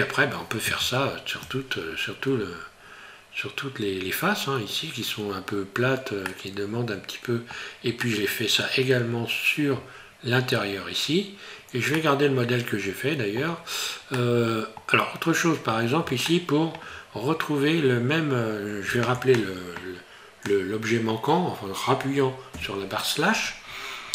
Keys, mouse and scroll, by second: 6.2 middle click, 8.0 middle click, 11.0 scroll down 2, 12.0 middle click, 14.2 middle click, 14.9 scroll down 1, 16.3 shift+middle click, 16.5 shift+middle click, 22.5 KP_Divide.